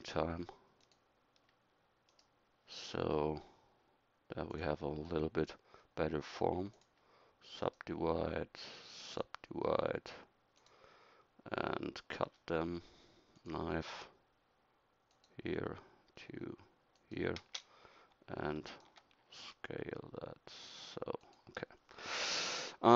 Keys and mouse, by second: 19.4 s.